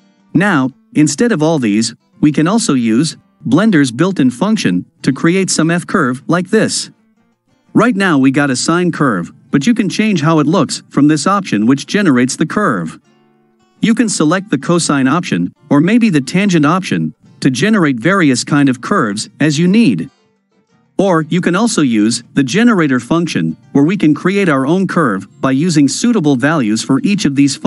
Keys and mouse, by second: 1.5 middle click, 6.7-8.6 ctrl+middle drag, 8.6 ctrl+click, 13.5-14.7 drag, 15.3-16.2 drag, 21.2-22.5 drag.